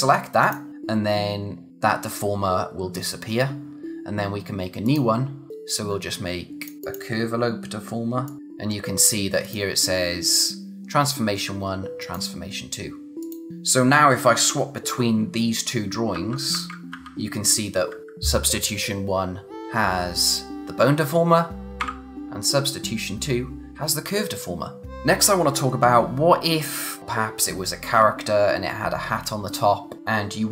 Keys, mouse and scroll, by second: 0.4 click, 4.8 click, 7.8 click, 9.4 click, 12.0 click, 16.1-16.9 typing, 21.8 ], 24.8 click.